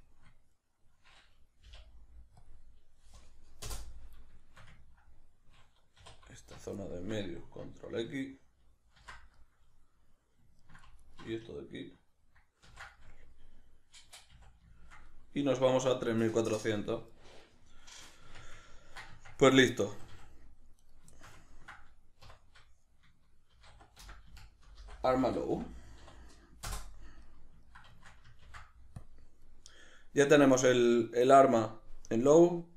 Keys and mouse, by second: 1.7 k, 6.0 2, 6.4 alt+right click, 6.8-11.0 ctrl+middle drag, 9.0 ctrl+x, 11.0 alt+right click, 12.6 ctrl+x, 13.0-32.5 middle drag, 14.3 a, 18.3 Tab, 19.1 Tab, 20.8 right click, 22.3 F2, 28.5 ctrl+s, 32.5 click.